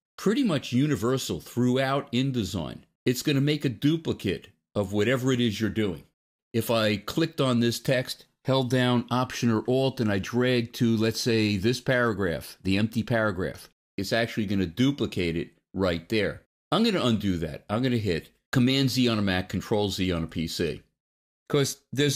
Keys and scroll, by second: 18.7 super+z.